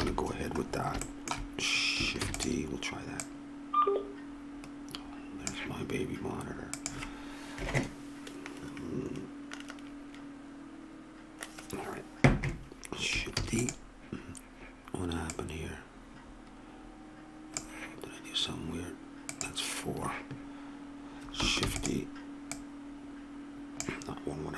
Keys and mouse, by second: 0.0 KP_3, 2.2 shift+d, 6.8-8.7 drag, 13.3 shift+d, 13.6-17.6 drag, 21.6 shift+d.